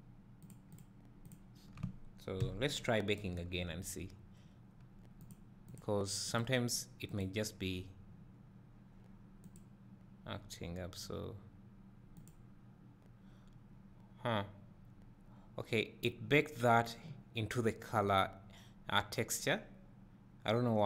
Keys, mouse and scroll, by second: 0.7-1.3 drag, 3.2 b, 5.3-6.6 drag.